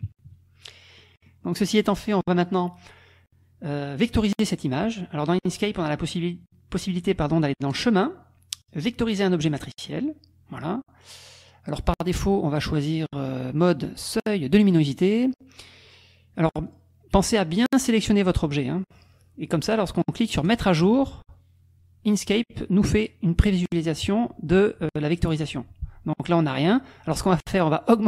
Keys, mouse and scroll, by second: 0.1 KP_Subtract, 1.0 click, 1.9 click, 7.8 click, 9.6 click, 11.2 click, 11.9 click, 13.6-15.1 drag, 16.7 click, 17.3 click, 20.5-26.3 drag.